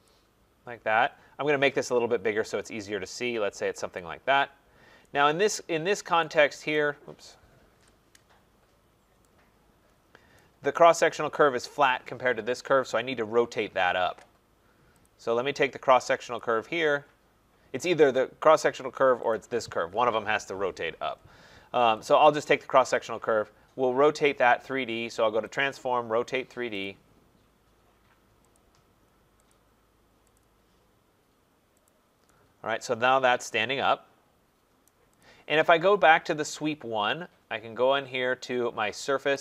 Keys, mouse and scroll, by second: 0.1 click, 1.8 middle click, 1.8 middle click, 1.9 middle click, 2.0 middle click, 2.1 middle click, 3.9 click, 5.5 right click, 6.7 right click, 7.7 Return, 8.8 middle click, 8.9 middle click, 10.3 right click, 14.9 right click, 15.0 click, 16.4 click, 19.3 click, 23.0 click, 25.5 click, 28.5 click, 29.5 click, 30.4 click, 31.9 click, 34.8 right click, 35.2 click, 39.3 click.